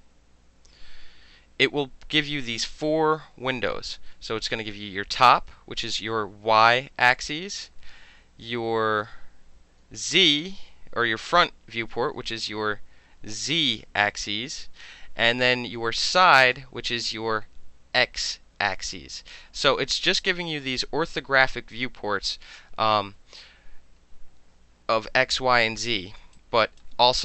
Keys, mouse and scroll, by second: 26.3 alt+right click, 26.4 alt+click, 26.6 alt+right click.